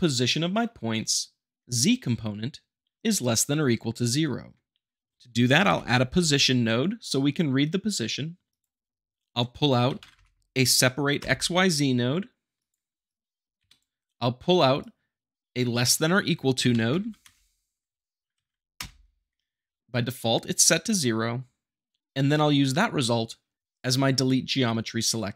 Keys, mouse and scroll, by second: 5.1 click, 5.6 p, 6.1 s, 8.5 click, 9.9 s, 10.1 p, 12.6 click, 13.6 Escape, 14.8 click, 16.6 l, 16.7 e, 17.0 s, 18.3 Down, 18.8 Return.